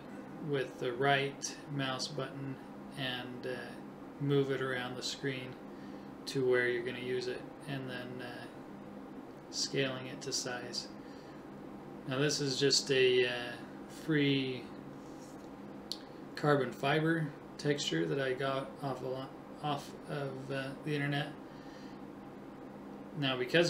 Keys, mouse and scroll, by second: 0.2 KP_1, 4.6-6.8 middle drag, 4.6-7.7 right drag, 15.4-17.2 right drag, 17.6-19.4 right drag.